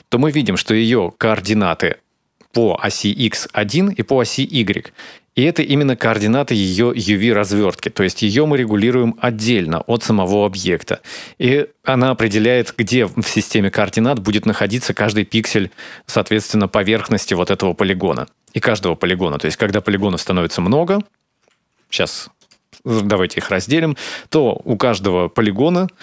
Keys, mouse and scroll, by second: 9.0 a, 9.7 s, 22.8 w.